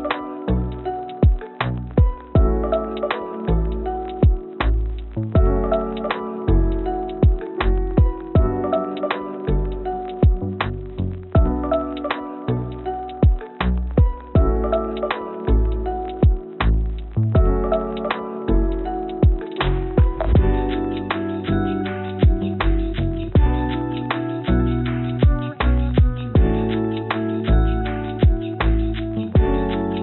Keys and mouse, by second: 1.2 g, 6.8-8.5 drag, 9.5 g, 12.7 click, 13.5-15.9 drag, 16.4 click, 21.1 g, 22.0 g.